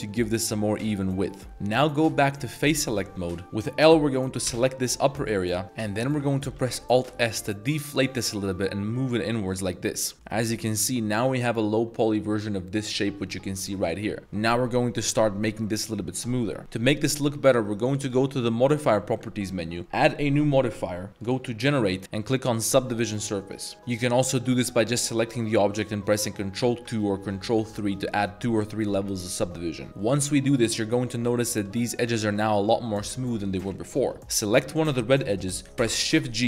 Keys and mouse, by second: 0.5 middle drag, 1.1 middle drag, 1.5 3, 3.3 middle drag, 4.5 l, 5.3-5.7 middle drag, 5.6 z, 5.9 middle click, 6.5 alt+s, 10.1 Tab, 10.1 middle click, 10.7 z, 10.8 middle drag, 11.1 z, 13.7 middle drag, 18.1 click, 19.8-22.8 drag, 24.1 middle click, 24.4 click, 24.6 g, 26.6 ctrl+2, 27.6 ctrl+3, 29.9 middle click, 29.9 2, 30.2-30.6 middle drag, 30.7 middle drag, 31.1 Tab, 31.5 2, 31.9 middle drag, 32.1 Tab, 32.4-32.7 middle drag, 33.0 middle drag, 33.8 middle click, 33.9 Tab, 34.1 2, 34.3 click, 35.8 shift+g.